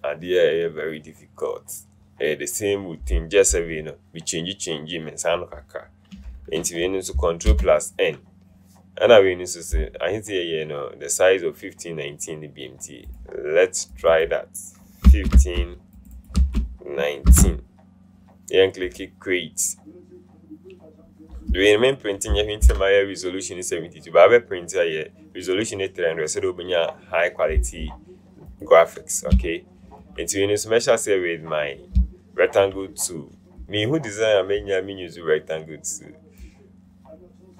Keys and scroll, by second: 7.6 ctrl+n, 15.4 KP_1, 15.5 KP_5, 16.5 KP_1, 17.4 KP_9, 22.7 ctrl+0.